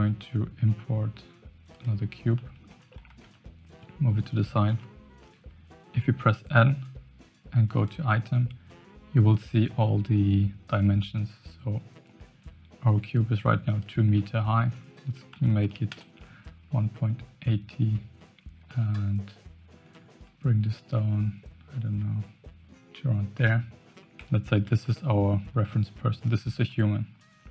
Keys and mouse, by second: 2.3-2.6 shift+drag, 3.0 g, 4.6 n, 13.7-15.9 drag, 20.0-22.6 shift+drag, 23.3 Tab, 24.5 g.